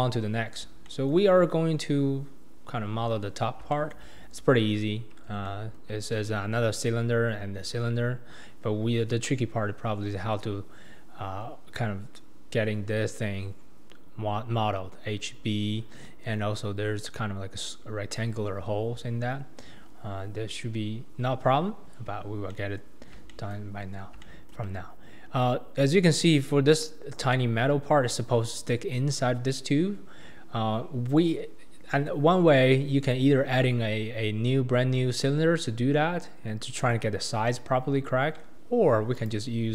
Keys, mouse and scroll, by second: 0.4-0.9 scroll down 2, 0.9-1.3 shift+middle drag, 1.3-2.0 scroll down 2, 2.9-3.2 scroll up 2, 3.7-8.5 shift+middle drag, 19.8-20.3 scroll down 4, 20.3-21.7 scroll up 4, 21.7-22.2 scroll down 1, 22.2 scroll down 1, 22.5-23.0 middle drag, 23.0 scroll down 2, 23.3-23.7 shift+middle drag, 23.7-24.2 scroll up 3, 24.2-24.7 shift+middle drag, 24.7-25.2 scroll up 2, 25.2-27.3 scroll down 2, 39.1 click.